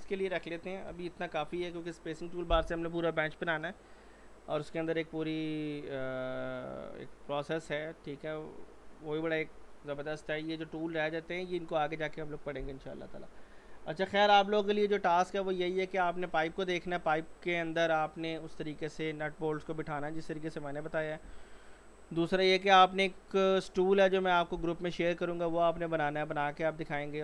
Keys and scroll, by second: 0.9 g.